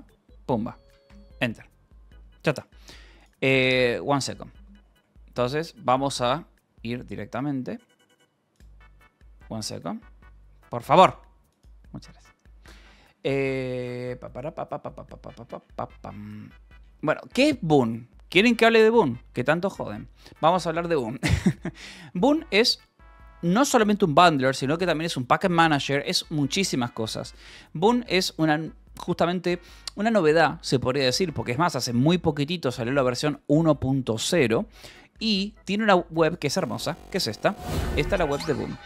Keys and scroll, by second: 0.1 Return, 4.2-5.5 typing, 5.7 Return, 38.0 g.